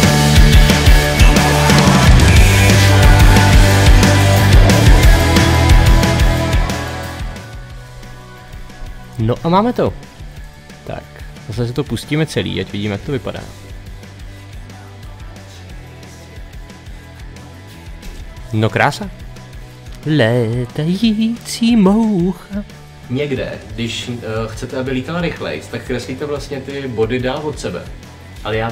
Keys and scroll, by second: 0.0 Page_Down, 0.3 Page_Up, 0.5 Page_Down, 1.2 Page_Down, 1.5 Page_Down, 1.8 Page_Down, 2.2 Page_Down, 2.5 Page_Down, 2.8 Page_Down, 3.1 Page_Down, 3.4 Page_Down, 3.7 Page_Down, 4.0 Page_Down, 4.2 Page_Down, 4.5 Page_Down, 4.9 Page_Down, 5.3 Page_Down, 5.6 Page_Down, 5.9 Page_Down, 6.2 Page_Down, 6.5 Page_Down, 7.1 Page_Down, 7.4 Page_Down, 7.6 Page_Up, 13.7 space.